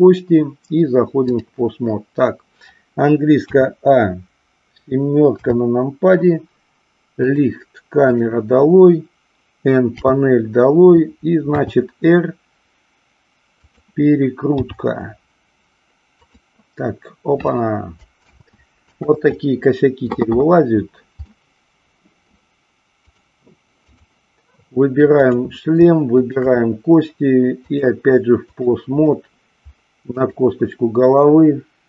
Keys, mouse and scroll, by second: 3.4 a, 5.2 KP_7, 7.1 click, 9.9 n, 11.5 r, 13.6 click, 14.6 g, 16.2 click, 18.2 ctrl+z, 21.2-22.2 middle drag, 23.1-24.1 drag, 25.1 click, 26.1 shift+click, 27.6-28.8 drag, 30.1 click.